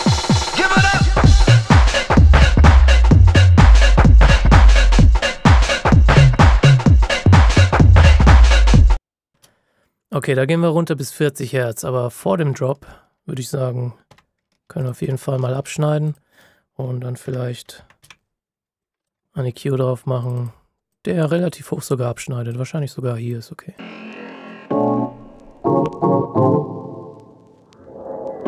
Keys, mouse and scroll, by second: 9.2 space, 11.9 ctrl+shift+scroll up 1, 14.7 ctrl+click, 15.4-16.0 ctrl+shift+scroll down 2, 16.0 click, 17.2-17.9 typing, 18.8 click, 20.6 scroll up 1, 20.8 click.